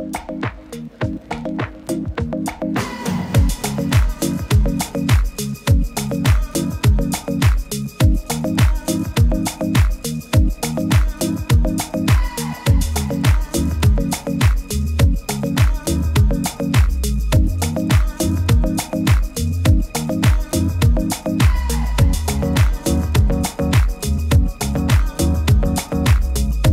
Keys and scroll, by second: 2.2 super+s, 8.5 super+*, 8.8 super+-, 9.0 super+-, 11.9 super+t, 12.4 super++, 12.6 super++, 12.7 super++, 15.2 super+-, 18.4 super+t, 21.2 super+t, 24.7 super+t.